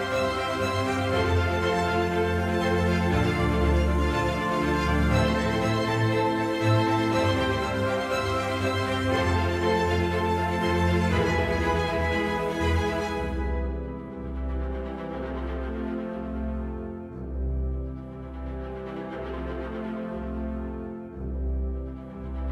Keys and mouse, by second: 9.6-10.9 typing, 11.2 KP_Enter, 12.2 click, 13.1 middle click, 13.9 KP_7, 17.3 right click, 18.2 s, 18.6 x, 20.4 shift+click, 21.1 right click, 21.9 s, 22.4 y.